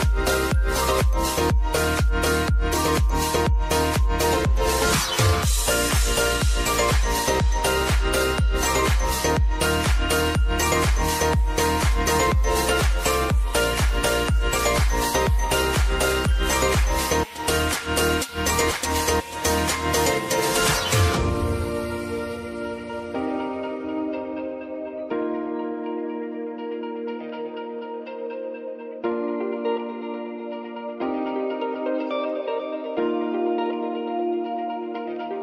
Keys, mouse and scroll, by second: 0.8 F9, 1.7 click, 2.0 space, 3.6-5.1 drag, 6.7 space, 8.0 click, 10.8 Return, 11.7 click, 12.2-13.0 typing, 14.3 typing, 14.9 click, 15.4 space, 18.9-25.8 drag, 26.1 space, 27.7-29.2 drag, 29.2 alt+click, 30.2 space, 31.6 click, 31.9 space, 33.4 click, 34.6 r, 35.2 click.